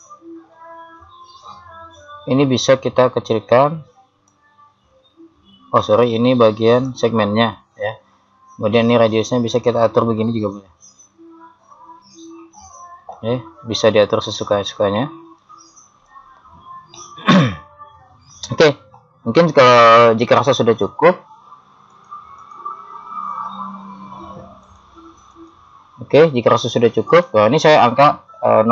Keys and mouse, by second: 2.2-4.3 middle drag, 4.3 click, 7.9-9.6 middle drag, 9.6 click, 17.1-18.7 middle drag, 21.9 click, 24.7-28.7 drag.